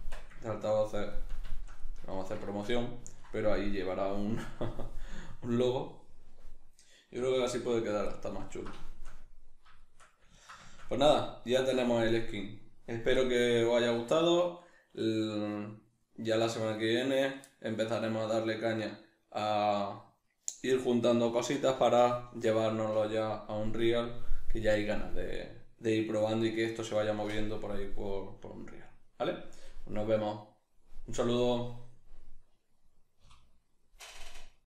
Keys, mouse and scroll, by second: 0.0 Tab, 0.5-8.1 ctrl+middle drag, 7.2 a, 8.1-8.5 drag, 8.5-34.6 ctrl+middle drag, 33.6 F9.